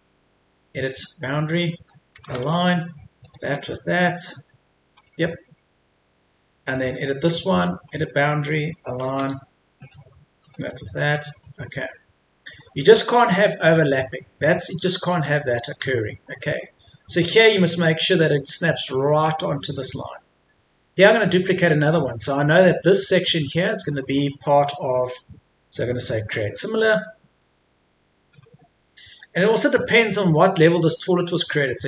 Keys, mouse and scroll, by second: 2.3 typing, 3.3 click, 6.2 Escape, 6.7 click, 9.1 typing, 9.8 click, 12.5 Escape, 13.3 scroll down 1, 13.4 Escape, 14.0 click, 14.3 scroll up 1, 14.5 Escape, 15.5 middle click, 16.1 Escape, 16.3 middle click, 16.9 Escape, 17.2-17.6 scroll up 1, 19.5 scroll down 1, 20.3 Escape, 20.5 middle click, 20.9 Escape, 21.9-25.7 scroll up 1, 26.5 click, 26.8 right click, 28.3 click, 31.1 middle click.